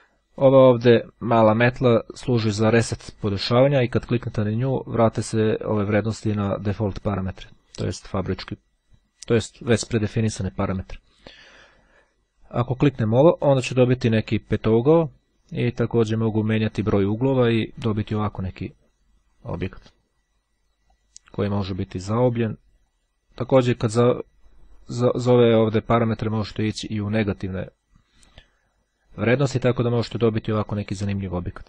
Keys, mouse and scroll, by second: 1.0-3.8 drag, 13.0 click, 15.8 click, 16.4 click, 20.9-22.4 drag, 23.2-24.2 drag, 26.6-27.7 drag.